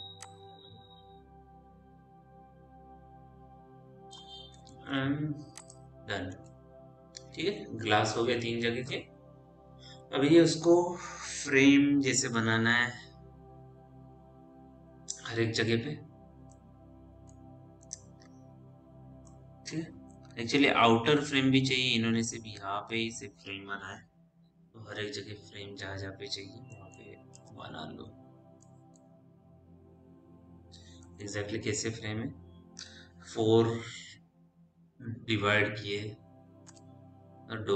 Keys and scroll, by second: 0.0 w, 5.2 p, 27.8 f, 31.8 p, 37.1 f.